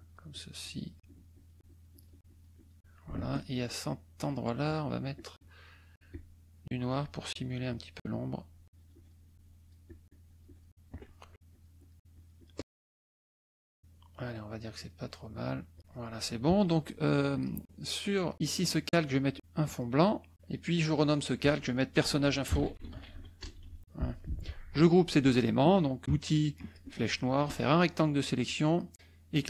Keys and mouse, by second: 1.0-2.2 shift+drag, 2.2 shift+click, 3.6 shift+click, 6.5-9.3 shift+drag, 9.3-10.8 shift+drag, 11.0 shift+middle click, 11.5 shift+click, 12.1 shift+click, 12.9 shift+click, 13.4 shift+click, 14.2 shift+click, 14.8-15.8 shift+drag, 15.8 shift+middle click, 17.3 click, 19.6 click, 20.4 click, 20.8 click, 22.2-23.4 typing, 23.8 Return, 26.6 click, 27.4 click.